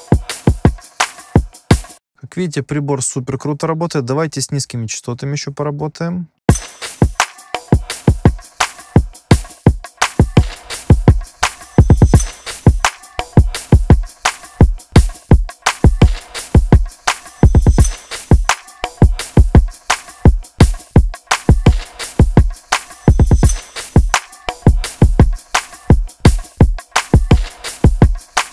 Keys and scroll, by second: 1.9 space, 6.4 space.